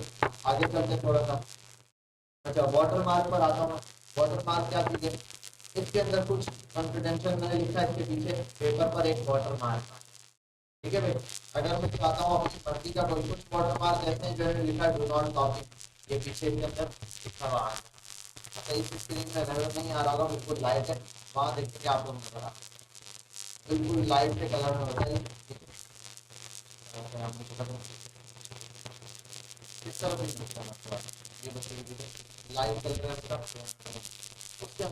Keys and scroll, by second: 12.1 ctrl+z.